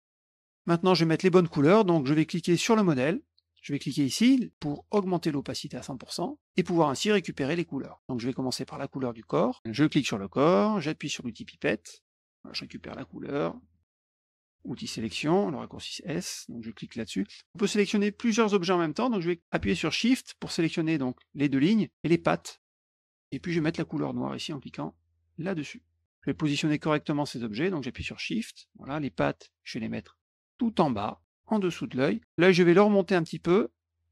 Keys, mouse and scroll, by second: 2.5 click, 4.6 click, 5.9 click, 6.6 middle click, 7.0 middle click, 7.4 middle click, 7.8 middle click, 9.7 click, 12.2 click, 12.8 click, 13.5 middle click, 14.7 click, 16.6 click, 20.9 shift+click, 22.3 shift+click, 22.8 shift+click, 23.2 shift+click, 25.3 click, 26.2 click, 28.1 shift+click, 28.5 shift+click, 30.2-31.3 drag, 32.2 click, 32.9-34.1 drag.